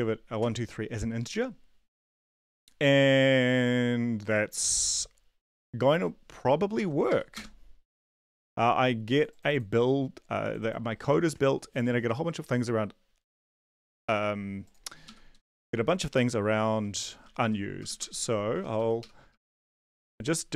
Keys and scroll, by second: 0.4 ctrl+s, 5.9 ctrl+`, 6.8 ctrl+l, 7.1 Up, 7.3 Return, 14.0 ctrl+`, 15.3 Return, 15.5 Up, 17.2 p, 18.7-20.5 typing.